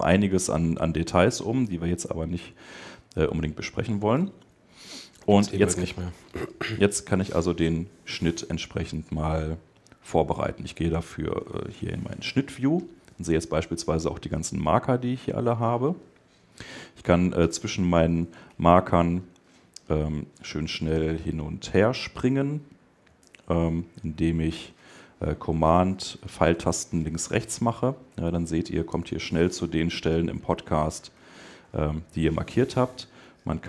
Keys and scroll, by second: 18.9 alt+Left, 21.0 alt+Right, 21.7 alt+Up, 22.4 alt+Right, 23.0 alt+super+Right, 26.0 super+Left, 26.8 super+Right, 28.2 super+Left, 29.7 super+Right, 31.0 super+Left.